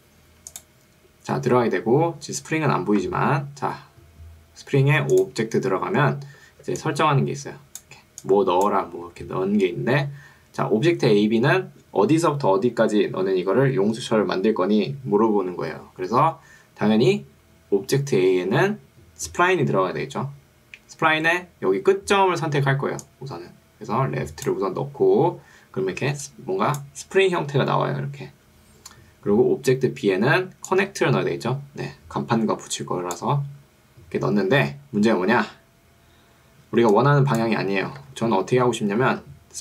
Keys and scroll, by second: 6.5 ctrl+2, 9.1 Escape, 26.1 ctrl+2, 28.3 Escape, 38.1 Escape, 39.1 ctrl+2.